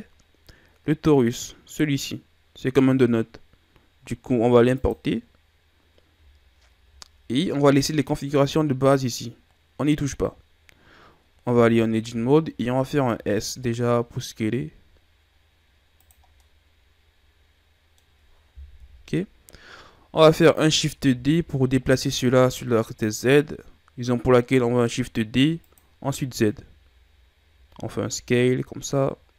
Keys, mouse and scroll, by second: 6.5-8.0 scroll up 3, 8.0-9.7 scroll up 1, 11.6 Tab, 13.2 s, 16.3 scroll down 2, 16.4-18.7 middle drag, 18.7 KP_1, 21.0 shift+d, 26.2-26.8 shift+scroll down 4, 26.8-27.6 scroll up 2, 27.6 scroll up 1, 27.6 s.